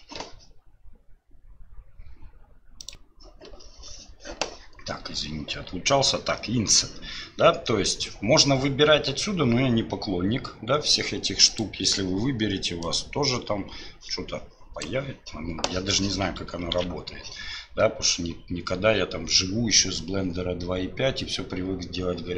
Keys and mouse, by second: 11.5 click, 13.0-14.8 drag, 16.8 ctrl+z.